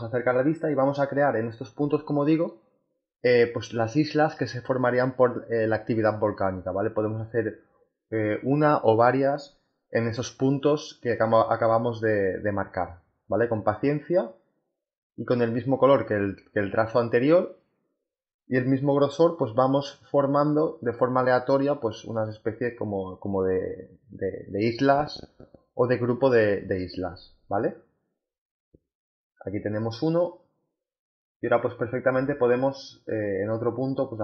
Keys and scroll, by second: 5.5 ctrl+z, 15.2 ctrl+z, 30.4 space.